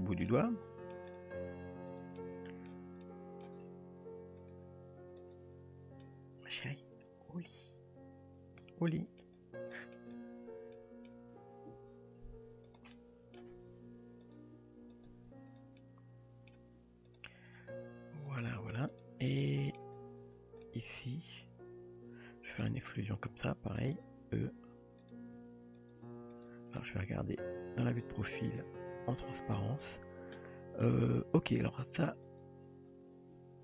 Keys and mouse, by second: 0.3-1.0 middle drag, 1.5 Tab, 2.0 click, 2.2-2.7 middle drag, 3.0-3.4 middle drag, 4.4 click, 5.3 click, 6.0-9.2 middle drag, 9.7 middle click, 10.7 middle click, 11.4 g, 13.0-13.4 middle drag, 13.7 s, 14.5 g, 15.5 click, 15.8 middle click, 16.8 g, 18.3 click, 19.0 click, 19.3-19.8 middle drag, 20.6-22.6 middle drag, 23.2 r, 24.4 e, 25.4 s, 26.0 g, 27.2 KP_3, 29.7 click, 32.3 click, 33.3 g.